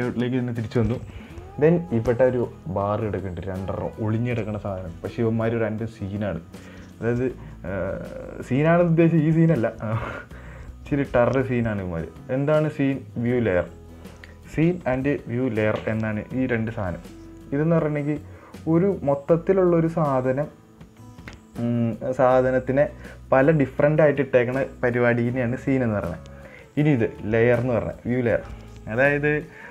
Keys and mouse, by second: 0.0 click.